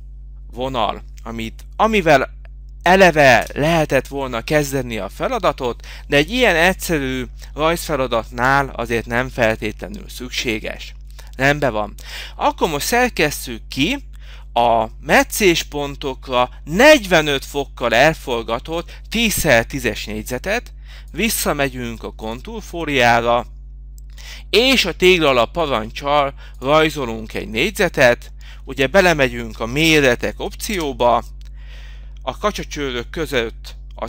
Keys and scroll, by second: 2.1 Return.